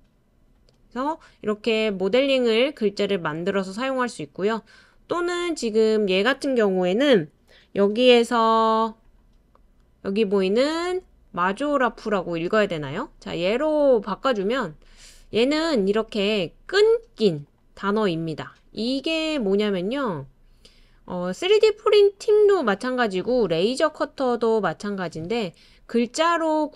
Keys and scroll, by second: 23.1-24.6 typing.